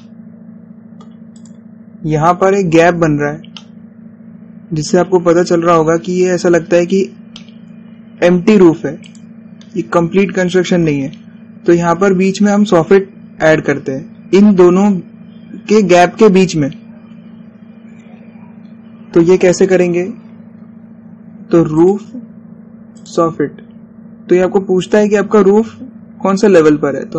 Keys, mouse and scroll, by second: 0.0 click, 0.7 scroll down 1, 1.0-2.4 shift+middle drag, 2.4 click, 4.3-4.6 scroll down 1, 4.6-6.4 shift+middle drag, 6.4 scroll up 1, 8.3 scroll down 1, 8.4-10.2 shift+middle drag, 10.2 click, 11.0-12.1 scroll up 1, 20.7-21.3 scroll down 1, 24.1 click.